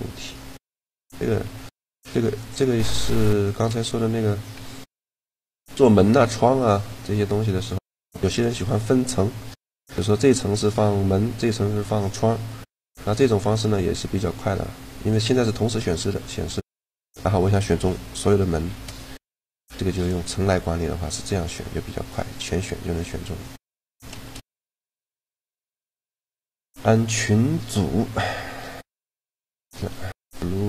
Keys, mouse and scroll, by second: 1.2 g, 6.4-9.3 middle drag, 12.4 middle click, 13.3-15.2 right drag, 15.2-18.3 drag, 18.3 shift+g, 20.8 g, 24.0 shift+g, 25.3 shift+g, 30.0-30.6 middle drag.